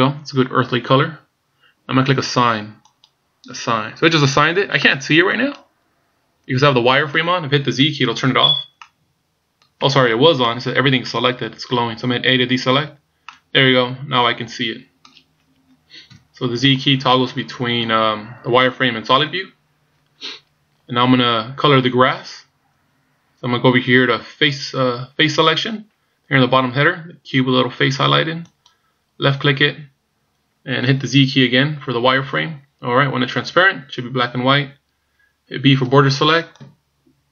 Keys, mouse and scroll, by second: 3.0 click, 4.9 middle click, 5.6-6.1 scroll up 4, 6.4 scroll down 3, 8.3 z, 8.9 middle click, 9.9 z, 10.5 middle click, 12.9 a, 13.3 middle click, 16.1 KP_1, 28.7 click, 32.3 z, 36.1 b.